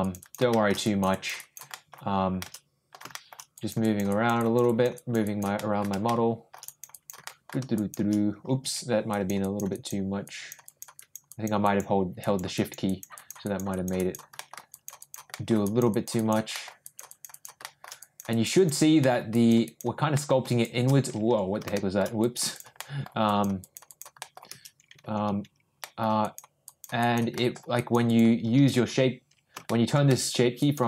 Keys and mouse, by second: 0.0 click, 0.2 click, 0.5 shift+middle click, 0.8 click, 1.1 click, 1.4 click, 1.7 middle click, 2.4 shift+middle click, 3.1 shift+middle click, 3.5 click, 3.8 click, 4.1 click, 4.4 click, 4.6 click, 4.9 click, 5.2 click, 5.5 middle click, 6.0 shift+middle click, 6.6 click, 6.9 click, 7.2 middle click, 7.7 shift+click, 9.1 ctrl+click, 9.4 ctrl+click, 9.7 ctrl+click, 10.2 ctrl+click, 10.6 ctrl+click, 10.9 ctrl+click, 11.3 ctrl+click, 11.6 ctrl+click, 12.2 ctrl+click, 12.5 ctrl+click, 12.8 click, 13.1 click, 13.4 click, 13.7 click, 14.0 click, 14.3 middle click, 14.7 click, 15.0 click, 15.3 middle click, 15.6 click, 15.9 click, 16.1 click, 16.5 middle click, 16.8 click, 17.1 click, 17.3 click, 17.6 shift+middle click, 18.0 click, 18.3 click, 18.5 click, 19.0 middle click, 19.3 click, 19.6 click, 20.1 middle click, 20.4 shift+click, 21.7 ctrl+shift+middle click, 22.2 ctrl+click, 22.5 ctrl+click, 22.8 ctrl+middle click, 23.2 ctrl+click, 23.6 ctrl+click, 23.9 ctrl+click, 24.2 ctrl+middle click, 25.8 ctrl+shift+middle click, 26.2 ctrl+shift+click, 26.6 ctrl+shift+click, 27.0 ctrl+shift+click, 27.4 ctrl+shift+middle click, 27.7 ctrl+shift+click, 28.0 ctrl+shift+click, 29.6 shift+middle click, 30.1 middle click, 30.6 click.